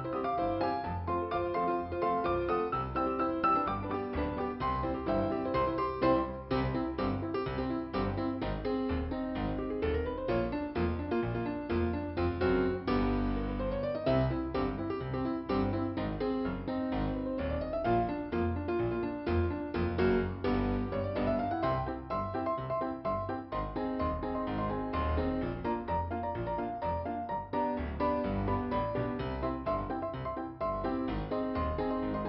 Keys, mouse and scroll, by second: 0.4 Delete, 1.6 p, 2.2 scroll down 2, 3.8 scroll down 1, 4.6 scroll up 1, 4.7 click, 6.3 click, 9.2 click, 11.1 click, 12.1 click, 12.3 click, 16.4 middle click, 17.5 scroll up 1, 19.2 scroll up 2, 20.8 click, 26.2 click, 27.1 click, 27.3 click, 27.3 click, 27.5 click, 27.7 double click, 27.8 double click, 28.1 double click, 28.1 double click, 29.5 double click, 30.9 scroll down 2.